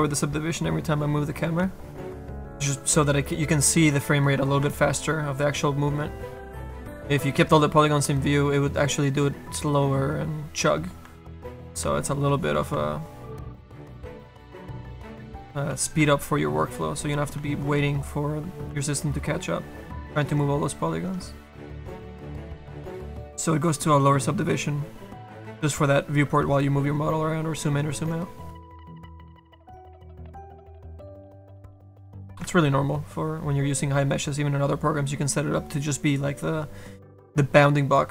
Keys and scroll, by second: 8.5 F2, 37.4 ctrl+z.